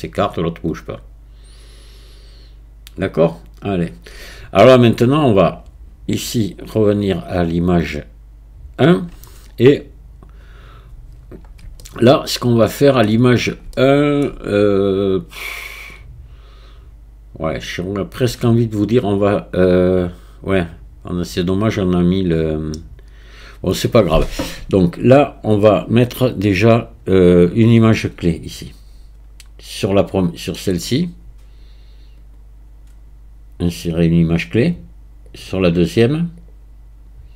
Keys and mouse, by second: 6.6-8.9 drag, 11.8 shift+click, 12.1-13.0 shift+middle drag, 13.7 shift+middle click, 32.3-35.3 right drag, 36.5-37.3 drag.